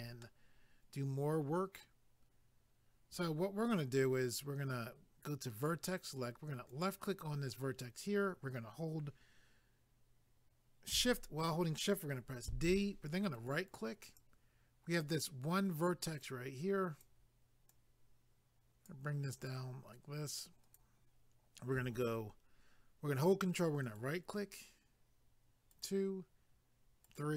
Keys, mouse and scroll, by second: 0.2 middle click, 3.5 scroll up 1, 5.5 click, 6.7 click, 13.3 right click, 14.2 click, 16.2 click, 17.7 click, 19.5 click, 23.8 ctrl+right click, 25.7 ctrl+right click.